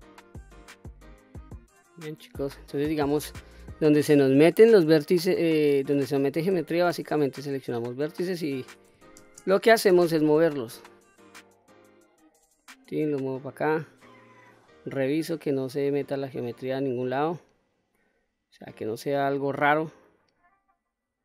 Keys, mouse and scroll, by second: 0.2-0.5 scroll down 1, 0.5 middle click, 1.3-1.9 scroll down 1, 1.9-2.6 middle drag, 2.9-3.3 scroll up 2, 3.3 middle click, 6.1 1, 7.4 click, 8.8 shift+space, 9.5 g, 11.8 click, 12.2-13.7 middle drag, 14.0-18.3 middle drag, 18.7-21.2 middle drag.